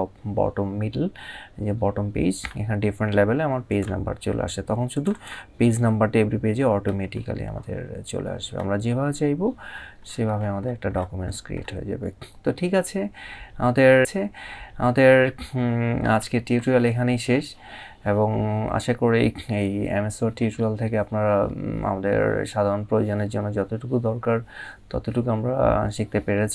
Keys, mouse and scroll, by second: 3.3 click, 5.5 scroll down 1, 9.3-9.9 scroll up 1, 10.1 scroll up 1.